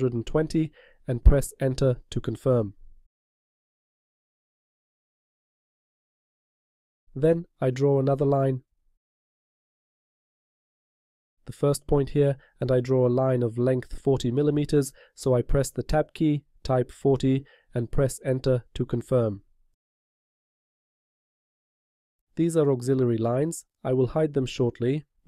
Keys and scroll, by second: 4.0 0, 5.2 Return, 15.6 Tab, 20.7 Return.